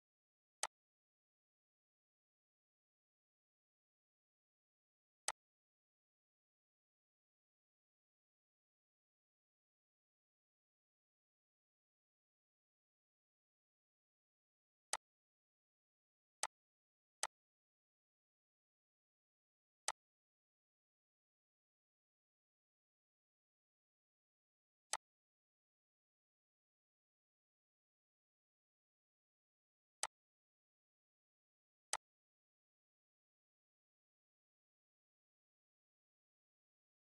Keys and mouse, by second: 0.2 click, 5.0 click, 14.6 click, 19.5 click, 24.6 click, 29.6 click.